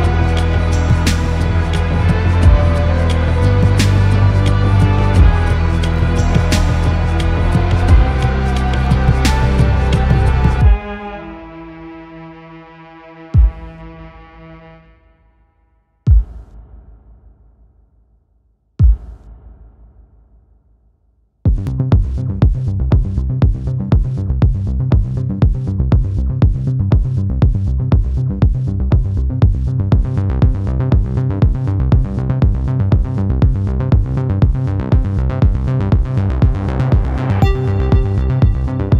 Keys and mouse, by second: 0.1 click, 1.9 click, 2.7-19.5 drag, 22.4 click, 24.9-27.5 drag, 27.7 click, 29.6 shift+a.